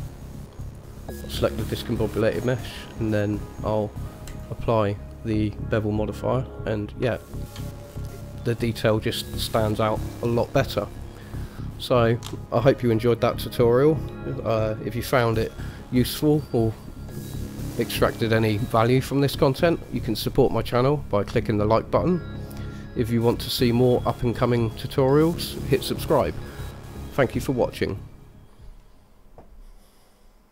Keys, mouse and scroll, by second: 0.1-0.8 scroll up 1, 0.8 click, 0.8 scroll up 1, 6.2 click, 7.4 shift+middle click, 8.2-8.6 scroll down 3, 8.8-11.5 scroll up 2.